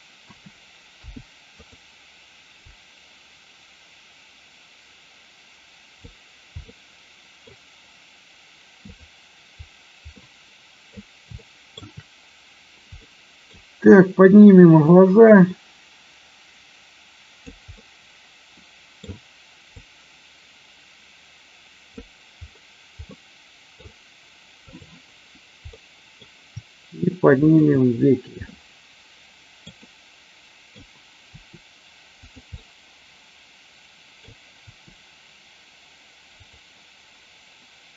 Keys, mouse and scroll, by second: 0.2 a, 0.9 i, 2.6-6.1 drag, 6.6 middle click, 8.8 click, 10.2-10.8 middle drag, 11.4-17.4 shift+middle drag, 17.8-19.0 middle drag, 19.7-21.9 drag, 23.0 scroll up 1, 23.2 middle click, 24.7 click, 25.7 middle click, 27.4 shift+click, 28.4-29.5 middle drag, 29.8-31.2 middle drag, 31.2 r, 32.2 click, 32.4-34.2 middle drag, 34.5 r.